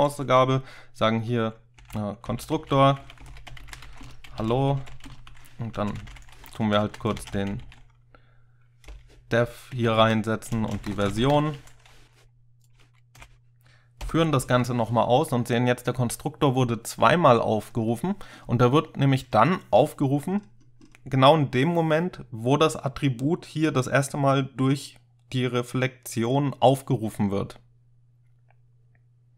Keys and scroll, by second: 1.6-5.4 typing, 5.8 ctrl+alt+7, 5.9 ctrl+alt+0, 6.0 ctrl+alt+7, 6.1 ctrl+alt+0, 6.5 Left, 6.7 Left, 6.9 Left, 7.0-11.9 typing, 9.8 Right, 10.0 Right, 13.2 shift+4, 14.1 ctrl+F5.